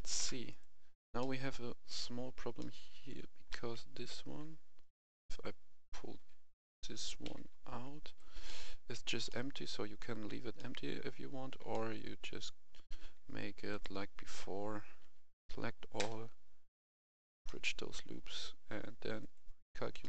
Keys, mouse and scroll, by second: 0.4 right click, 1.1-4.2 middle drag, 3.4 g, 4.7 Escape, 5.0 KP_1, 6.1 g, 7.2 z, 8.0 click, 8.4 middle click, 9.6 scroll up 1, 10.4 scroll down 1, 10.5 middle click, 11.1-11.5 scroll down 1, 11.5 scroll up 1, 11.7 middle click, 12.1 Tab, 13.7 click, 15.0 a, 16.6 click, 17.4 middle click, 19.1 click, 19.9 middle click.